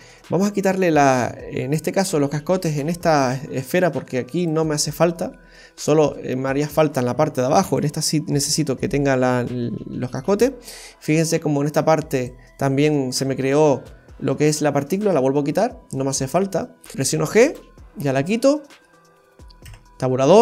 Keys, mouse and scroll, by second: 4.4 click, 5.1-5.6 scroll down 4, 5.5 middle click, 6.1 shift+middle click, 6.7-7.1 scroll down 5, 7.7 right click, 10.5-11.2 scroll up 5, 10.5 space, 11.2 shift+middle click, 12.2 right click, 15.0 click, 15.4-15.9 scroll up 2, 15.9 shift+middle click, 16.4-16.7 scroll up 1, 16.7 middle click, 16.9 g, 17.8-18.1 scroll down 1, 18.1 shift+middle click, 19.6 Tab.